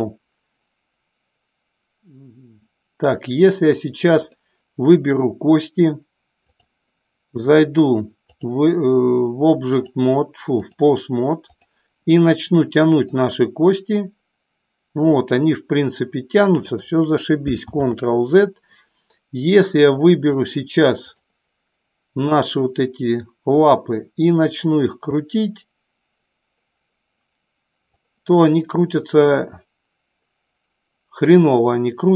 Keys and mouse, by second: 4.3 click, 6.4-8.5 drag, 9.7-10.7 drag, 11.4 click, 13.0-16.6 drag, 17.9 ctrl+z, 20.2 click, 24.4-27.9 drag.